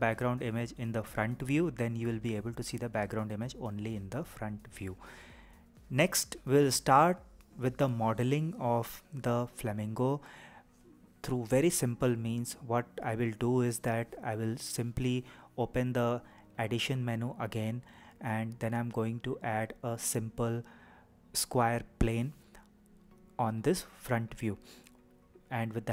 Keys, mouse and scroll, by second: 0.4-1.4 scroll down 1, 1.4-2.9 scroll up 1, 2.9-3.4 scroll down 1, 3.4-3.7 scroll up 7, 3.7-4.1 scroll down 4, 5.0-8.1 scroll up 2, 14.9 shift+middle click, 15.4 click, 16.1 shift+a.